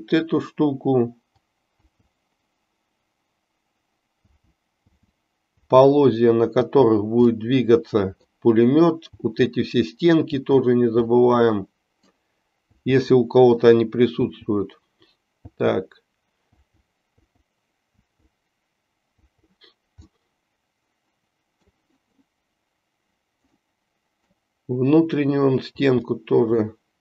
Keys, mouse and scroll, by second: 1.8 l, 7.4-8.4 middle drag, 11.3-12.3 middle drag, 15.4 l, 20.2-21.7 middle drag, 23.5 middle click, 25.8 l, 26.8-27.0 middle drag.